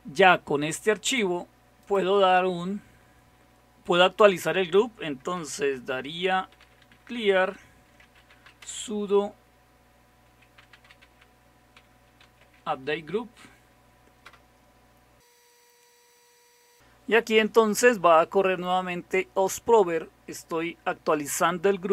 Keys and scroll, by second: 6.2-9.0 typing, 10.2-15.0 typing.